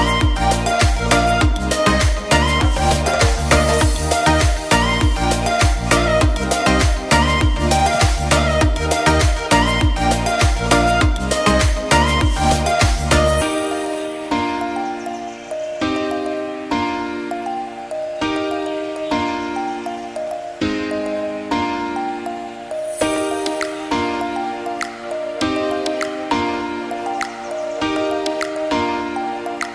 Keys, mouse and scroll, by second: 0.4 click, 0.6 KP_0, 0.8 click, 1.5 click, 1.7 shift+d, 2.3 click, 6.4-7.6 drag, 11.0 click, 11.3 s, 11.8 g, 13.0 click, 19.9 click, 20.9 scroll down 6, 21.1 click, 21.8 click, 22.1 click, 22.9 click, 23.1 r, 23.8 click, 25.2 click, 25.4 shift+d.